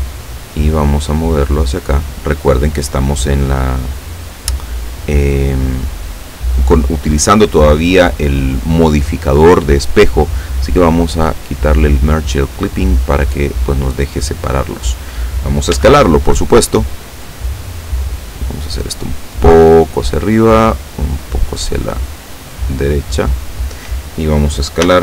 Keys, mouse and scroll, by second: 1.2-6.2 drag, 11.0 click, 11.5 click, 12.8-15.3 drag, 15.8 s, 17.5 click, 18.3-20.4 drag, 20.8-23.6 drag, 24.9 s.